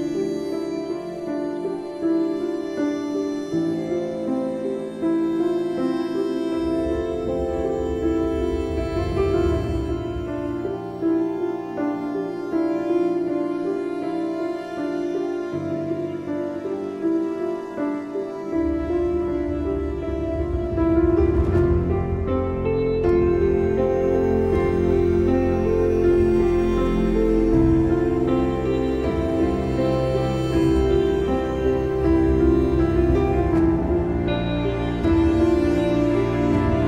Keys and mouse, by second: 0.1 space, 0.3 click, 0.5 space, 3.0 space, 3.1 click, 4.3 ctrl+=, 4.5-5.3 typing, 5.0 click, 6.6 click, 8.3 click, 11.6 click, 12.8 click, 15.7 click, 17.4 click, 19.5 click, 20.9 click, 22.1 click, 23.4-27.5 drag, 28.0 click, 28.4 click, 29.2 click, 30.1 click, 30.9 ctrl+=, 33.2 Left, 33.6 click, 34.5 click, 34.5 click, 35.7 ctrl+shift+[, 36.0 click.